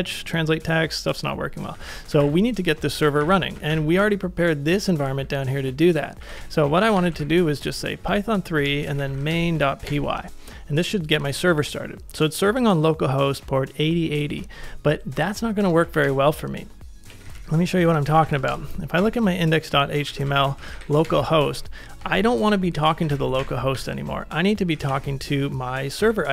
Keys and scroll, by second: 0.6 super+Tab, 1.8 ctrl+a, 2.2 ctrl+a, 2.2 ctrl+j, 3.1 ctrl+a, 3.6 ctrl+a, 5.9-11.4 typing, 15.9 ctrl+a, 16.8-21.2 typing, 21.5 ctrl+c, 22.0 ctrl+c, 22.5-24.3 typing, 24.9 super+v, 26.0 ctrl+c.